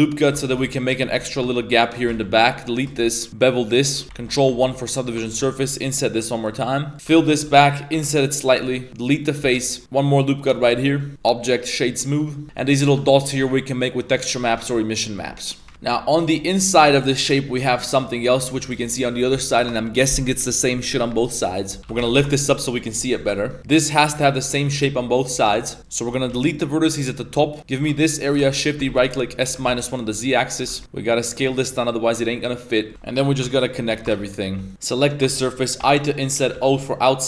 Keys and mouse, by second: 0.4 shift+middle click, 0.6-2.1 typing, 0.7 middle click, 1.8 alt+right click, 2.9 shift+middle click, 3.3 ctrl+b, 3.3 2, 4.0 Tab, 4.1 ctrl+1, 4.5 ctrl+2, 4.7 middle click, 5.1 Tab, 5.3-9.4 typing, 5.3 right click, 5.5 middle click, 6.5 middle click, 6.9 ctrl+z, 9.6 middle click, 9.8 ctrl+r, 10.7 Tab, 10.8 middle click, 11.1 click, 12.1 middle drag, 15.7 ctrl+s, 16.5 middle click, 21.5 middle click, 21.8 Tab, 21.8 g, 22.7 g, 23.2 KP_Decimal, 23.5 Tab, 25.5 shift+middle click, 25.8 ctrl+shift+right click, 26.3 x, 27.9 g, 28.4 shift+d, 28.8 s, 31.3 s, 32.8 middle click, 32.9 shift+s, 32.9 1, 32.9 2, 34.1 a, 34.1 shift+w, 34.5 1, 35.0 ctrl+shift+right click, 35.8 i.